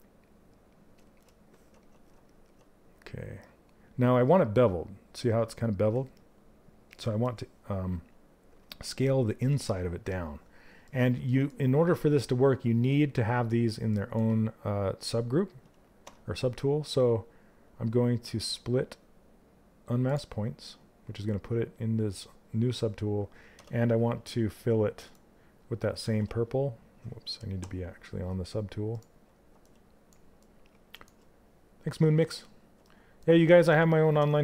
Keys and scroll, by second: 33.7 q.